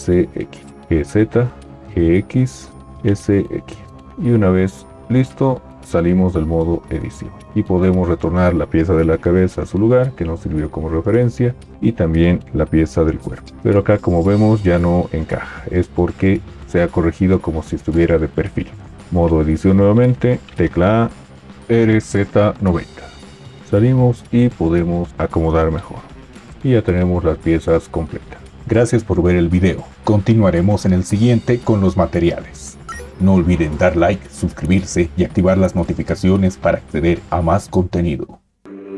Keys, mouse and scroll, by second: 0.8 g, 0.8 z, 1.9 g, 1.9 x, 3.0 s, 3.0 x, 6.3 Tab, 9.5 g, 13.4 g, 20.5 a, 23.7 Tab, 25.1 g.